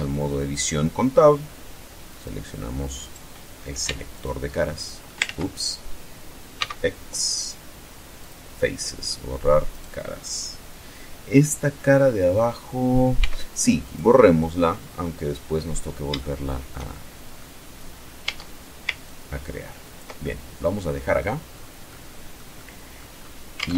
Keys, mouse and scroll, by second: 1.8 click, 2.6 right click, 3.5 x, 3.8 click, 4.3 middle click, 4.9 ctrl+z, 6.3 x, 7.8 click, 8.3-8.9 middle drag, 9.4 right click, 12.9 x, 13.5 click, 13.9-14.9 middle drag, 15.1-15.6 scroll up 1, 15.9-17.2 shift+middle drag, 17.9 Tab, 18.7-19.8 ctrl+drag, 19.9-21.0 ctrl+middle drag, 21.2-21.5 scroll down 2, 21.6 middle click, 22.8-23.1 scroll up 2, 23.2 alt+Tab.